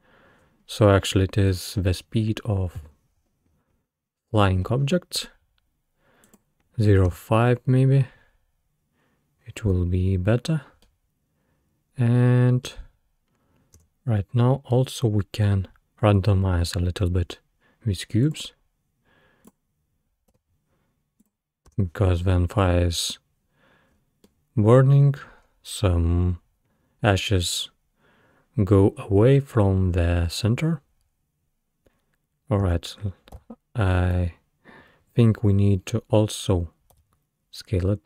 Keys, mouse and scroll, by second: 7.1 space, 7.9-8.9 scroll down 2, 10.9-13.8 middle drag, 13.8 space, 14.5-14.9 scroll down 2, 18.3-21.3 drag, 21.7 space, 23.7-24.3 scroll up 4, 24.3-25.4 middle drag, 25.4 scroll down 2, 30.7 scroll down 2, 32.6 space, 33.4 w, 34.3 Escape, 35.1 Escape, 36.9 s.